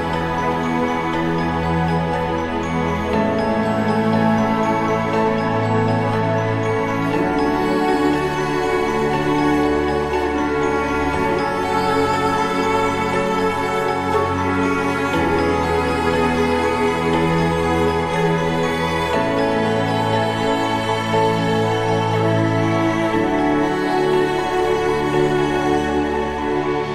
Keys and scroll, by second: 1.3 ctrl+=.